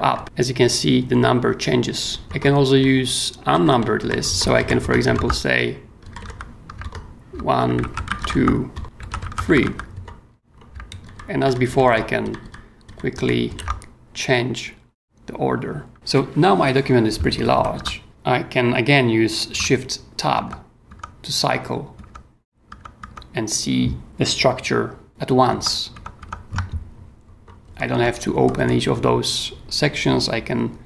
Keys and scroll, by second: 0.1 super+Up, 0.2 super+Down, 1.0 super+Up, 2.3 Escape, 2.5 k, 4.0 Escape, 4.4-6.7 typing, 4.5 Escape, 4.8 Return, 6.8 super+e, 6.9 super+Return, 7.8 super+t, 7.8-9.9 typing, 8.7 Return, 10.7 super+Escape, 11.0 super+Up, 11.7 super+Down, 12.2 super+Up, 13.1 super+Down, 17.1-18.6 typing, 20.3 shift+Tab, 25.5 shift+Tab, 27.4-28.9 typing.